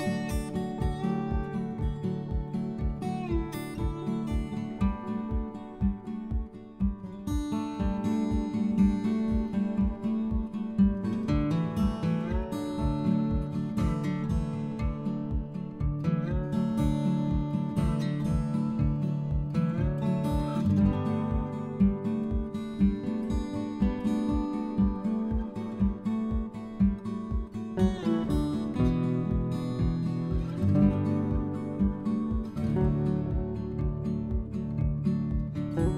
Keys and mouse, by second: 0.3 click, 0.5 Tab, 0.8 click, 1.9 Tab, 2.3 a, 3.1 middle click, 4.9 middle click, 5.5 s, 5.6 x, 6.9 click, 7.2 middle click, 9.1 click, 9.4 middle click, 11.3 click, 12.8 s, 13.0 x, 13.7 click, 13.9 Tab, 14.1 click, 14.9 click, 15.2 middle click, 19.6 Delete, 19.6 click, 20.1 click, 20.6 middle click, 21.1 middle click, 22.2 Tab, 25.6 r, 26.0 x, 26.2 9, 26.2 0, 26.7 Return, 30.0 8, 31.6 click, 32.5 g, 33.6 click, 34.0 s, 34.7 click, 35.5 g.